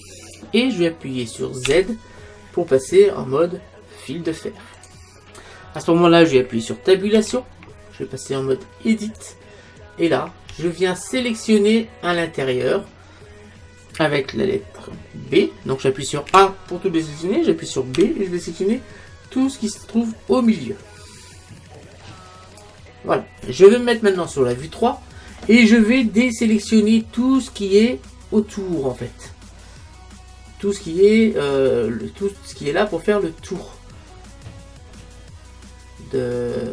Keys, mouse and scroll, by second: 1.7 z, 7.2 Tab, 10.0-12.5 middle drag, 16.3 a, 18.0 b, 24.4 KP_3, 25.6-29.5 middle drag, 33.6-35.5 middle drag.